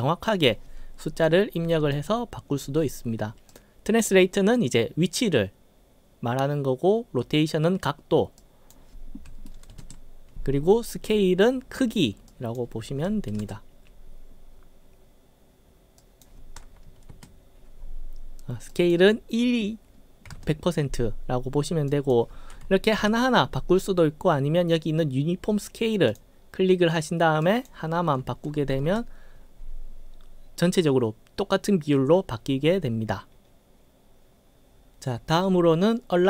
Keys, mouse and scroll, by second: 0.0 click, 3.5 click, 8.4 click, 12.4 click, 16.1 click, 18.8 click, 22.0 click, 26.2 click, 27.5 click.